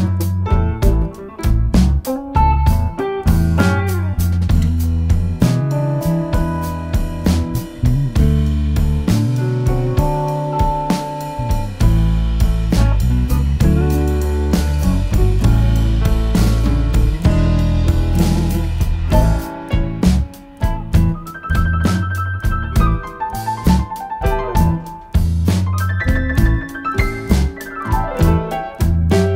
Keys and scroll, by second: 5.0 F1, 10.9 Home, 11.5 typing, 13.8-14.4 typing, 14.8 F7, 17.6 F1, 18.1-19.1 typing, 21.3 typing, 23.0 Home, 24.3 ctrl+shift+g, 25.0 Delete, 26.9 Delete.